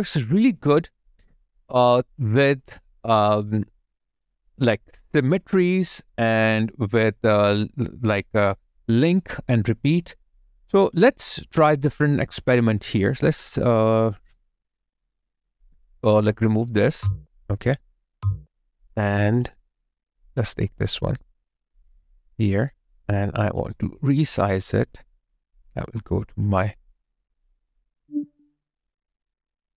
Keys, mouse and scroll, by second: 16.8 Delete, 23.6 alt+right click, 23.8 alt+click.